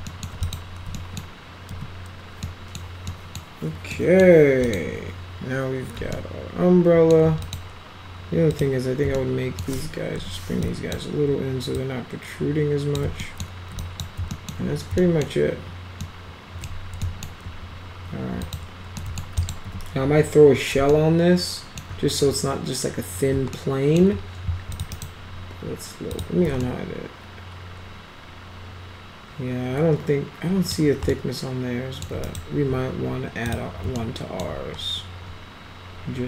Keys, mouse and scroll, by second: 0.0 alt+middle click, 0.4 click, 0.9 middle drag, 1.7 F4, 2.4-2.8 middle drag, 3.1 middle click, 3.9 middle click, 4.6 click, 6.1 alt+middle click, 7.4 click, 8.5 click, 9.1-9.6 alt+right drag, 10.1 1, 10.6 drag, 11.8-12.9 drag, 13.2 alt+right click, 13.3 alt+middle click, 13.8 drag, 14.3 alt+middle click, 15.0 alt+middle drag, 16.0-16.6 alt+middle drag, 17.0 alt+middle drag, 18.4 click, 19.0 alt+middle drag, 19.4 alt+click, 19.6 z, 20.9 alt+middle click, 23.5 alt+middle click, 24.8 click, 24.9 right click, 26.1 click, 26.6-30.7 alt+middle drag, 31.1-32.0 alt+middle drag, 32.3 right click, 33.5 click, 34.0 alt+middle click.